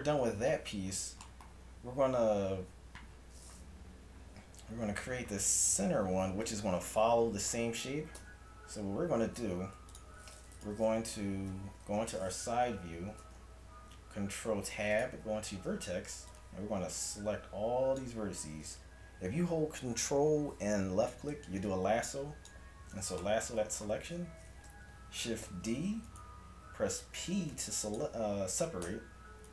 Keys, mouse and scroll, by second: 7.7 middle click, 8.2 Tab, 9.4 ctrl+Tab, 11.9 KP_3, 13.2 ctrl+Tab, 15.6 a, 16.8-18.8 drag, 21.4-23.2 drag, 23.2-25.5 middle drag, 25.5 shift+d, 27.0 p, 28.9 Tab.